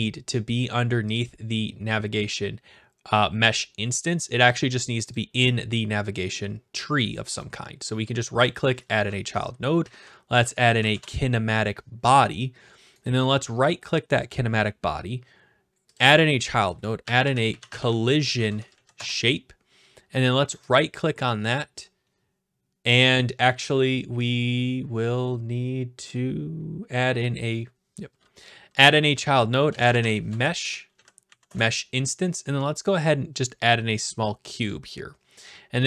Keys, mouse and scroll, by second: 2.2 click, 5.2-6.2 drag, 7.4-8.6 right drag, 8.6-9.6 drag, 9.6-10.8 typing, 13.0-14.1 right drag, 16.0 click, 16.8-18.7 typing, 17.0 click, 18.9 Return, 20.6 right click, 28.9 click, 29.5-31.9 typing, 32.8-33.9 drag, 34.6-35.7 drag.